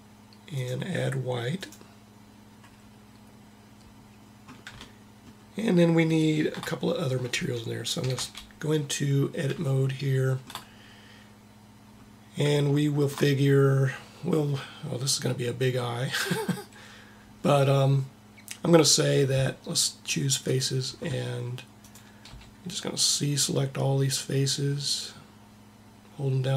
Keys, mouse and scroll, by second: 7.9 Tab, 22.4 c.